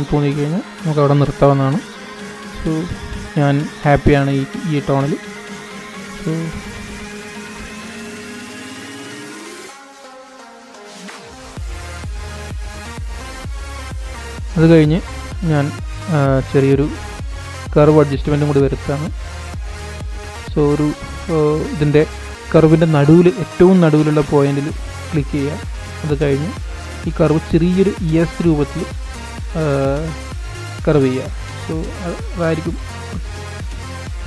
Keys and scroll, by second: 21.7 super+=, 23.6 super+=.